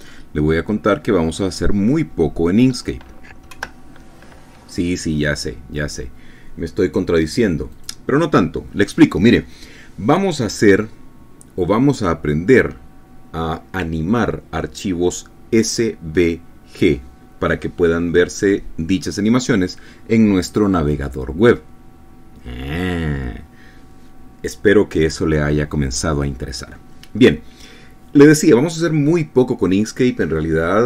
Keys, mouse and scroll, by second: 4.5 F10, 8.7 click.